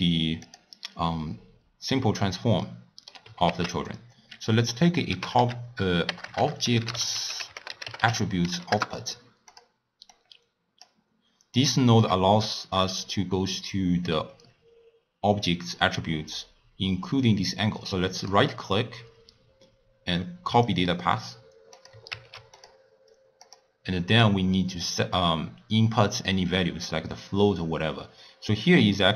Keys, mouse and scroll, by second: 0.4 click, 2.6 middle click, 3.5 ctrl+a, 6.2 BackSpace, 6.4 BackSpace, 8.0 t, 10.1 click, 11.7 click, 18.3-21.3 right drag, 21.7-22.8 drag, 23.6 drag.